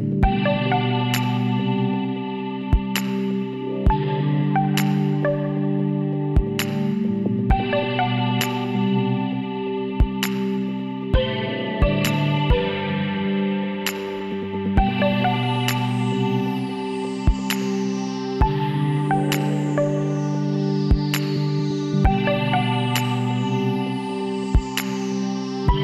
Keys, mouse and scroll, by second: 1.9-3.2 middle drag, 3.2 shift+d, 5.6 KP_1, 7.6-9.3 drag, 9.8-12.9 middle drag, 12.9 s, 16.0 r, 18.8-20.5 middle drag, 21.2 KP_3, 22.8 KP_9, 23.5-25.3 middle drag, 25.3 s.